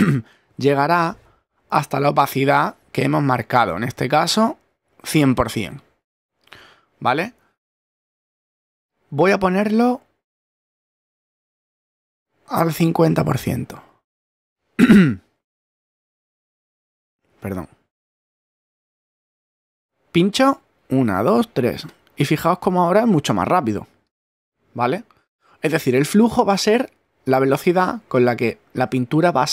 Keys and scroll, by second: 15.7 a, 17.2 b.